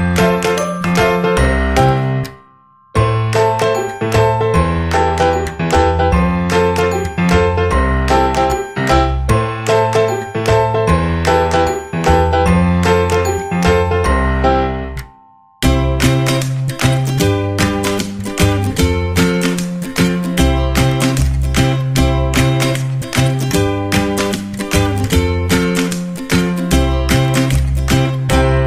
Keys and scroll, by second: 1.6 ], 1.7 2, 2.0 0, 14.2 Down, 15.1 Down, 15.9 Up, 20.0 Down, 23.1 Down, 23.7 Down, 28.2 Down.